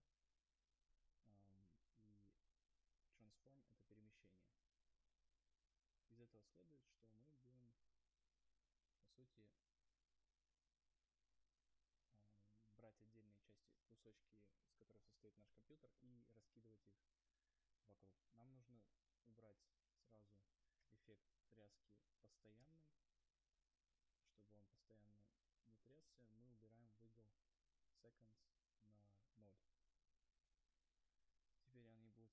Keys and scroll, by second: 25.9 Return.